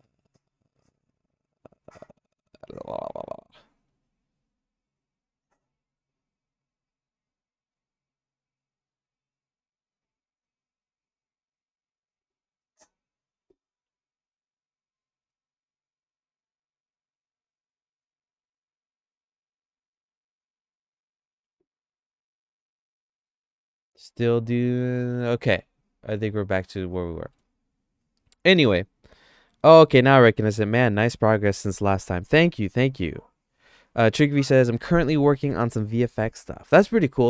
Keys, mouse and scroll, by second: 0.5 click, 1.1 click, 10.0 click, 11.1 click, 12.2 click, 13.8 x, 16.2 click, 18.4 click, 19.0 click, 19.8 click, 21.4 x, 23.3 click, 25.3 x, 26.4 middle click, 26.9 shift+middle click.